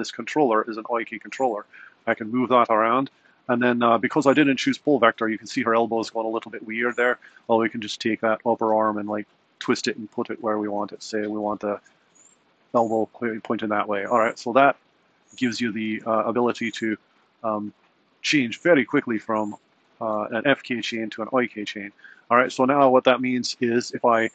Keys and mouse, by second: 8.9 r, 16.1 g, 18.8 r, 22.6-23.1 typing.